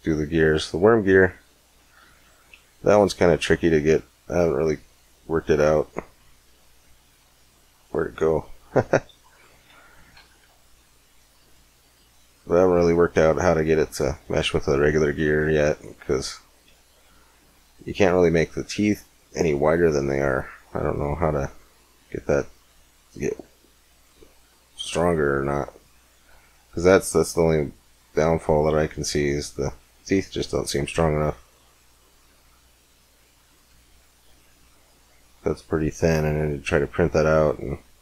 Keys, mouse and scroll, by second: 0.5 click, 1.2 click, 1.4-3.9 middle drag, 4.4-6.2 drag, 10.3 KP_Decimal, 10.4-11.4 drag, 12.2-13.5 drag, 13.8-16.3 drag, 18.4-19.4 drag, 20.5 click, 22.9-24.0 drag, 24.5-26.3 drag, 26.9-28.7 drag, 31.1-32.9 drag, 34.0-36.1 middle drag.